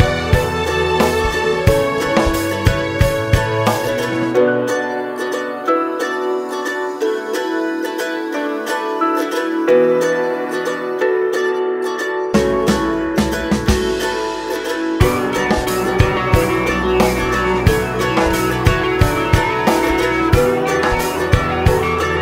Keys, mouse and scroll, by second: 0.1 click, 0.3 Tab, 0.5 click, 1.0 l, 1.7 g, 1.8 right click, 2.1 Tab, 2.5 a, 2.7 Tab, 3.1 Tab, 3.3 click, 3.6 Tab, 3.7 click, 4.4 a, 4.7 click, 5.1 ctrl+l, 6.3 a, 8.9 click, 9.2 scroll down 1, 9.3 alt+a, 10.1 x, 12.5 click, 14.5 scroll down 1, 14.6 KP_1, 15.4 click, 15.9 KP_1, 17.9 click, 17.9 scroll up 1, 18.5 scroll up 1, 20.7 click, 21.7-22.2 drag.